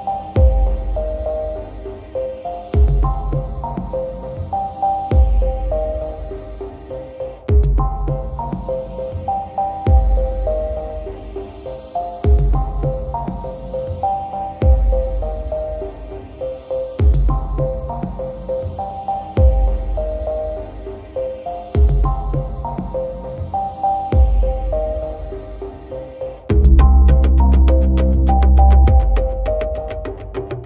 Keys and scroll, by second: 0.8 ctrl+alt+z, 6.4 ctrl+d, 7.0 ctrl+-, 7.4 ctrl+0.